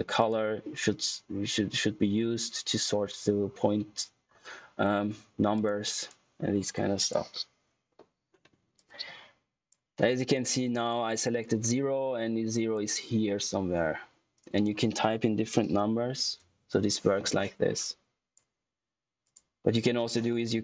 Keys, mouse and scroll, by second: 0.1 click, 5.5 click, 15.5 space, 17.5 scroll down 1, 17.7 click.